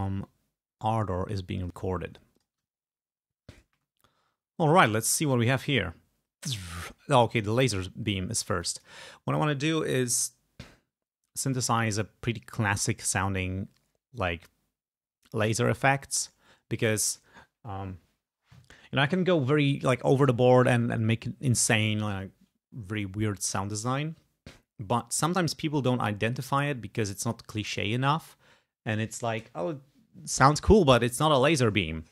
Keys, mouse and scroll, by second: 0.2 click, 1.6 click, 2.4 click, 4.0 ctrl+scroll up 2, 4.6 ctrl+click, 5.1 ctrl+space, 7.6 space, 8.6 click.